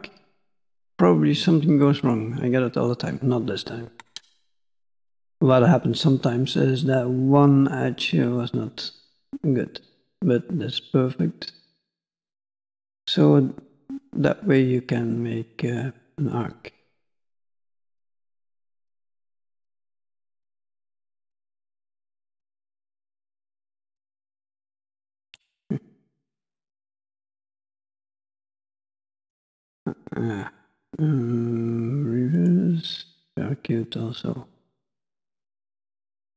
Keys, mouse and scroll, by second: 2.0 click, 9.1 click, 13.1 click, 16.3 click, 20.3 click, 22.2 click, 26.4 click, 32.4 click, 32.9 click, 34.6 click.